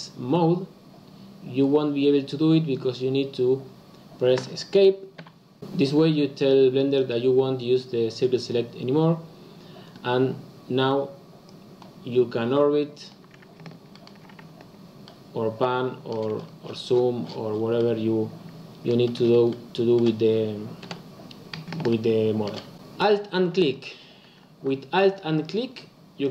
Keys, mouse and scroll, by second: 11.4 click, 13.9-16.3 shift+middle drag, 16.3-16.8 scroll up 5, 16.8-17.3 scroll down 4, 17.3 scroll up 1, 17.4-17.7 scroll down 3, 17.7-18.9 middle drag, 18.9-19.4 scroll up 3, 19.4-20.8 middle drag, 20.8 KP_7, 21.8 shift+middle click, 23.6 alt+click, 25.3 alt+click, 26.2 alt+click.